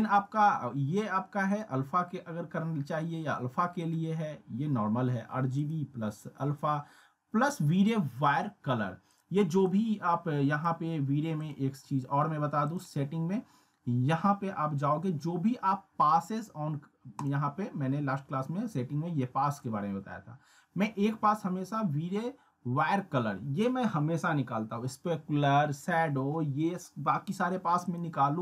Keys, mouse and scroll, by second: 1.5 click, 3.8 click, 9.1-10.9 drag, 17.2 click, 19.5 click, 27.8 click.